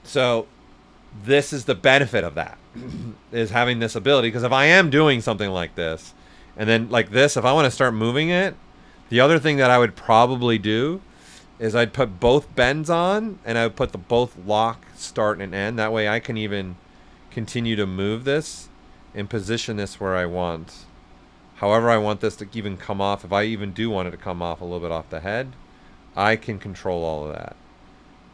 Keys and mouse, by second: 5.0-8.9 drag, 8.9 ctrl+z, 9.4 alt+right click, 10.4 click, 15.8 click, 16.9 click, 17.7 right click, 18.3 click, 18.7 right click, 19.3 click, 20.3 right click, 20.9-22.7 drag, 22.7 right click, 23.2 click, 24.3 right click, 25.0-28.3 drag.